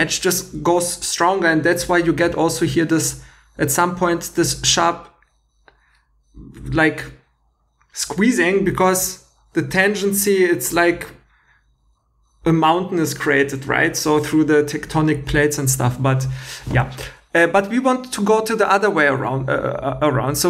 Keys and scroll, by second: 16.6 Escape.